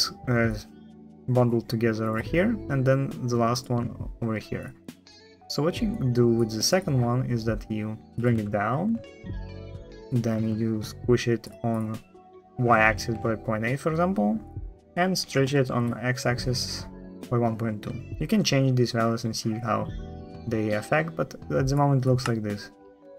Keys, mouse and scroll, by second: 1.5 middle click, 1.9 click, 21.9 space, 23.0 space.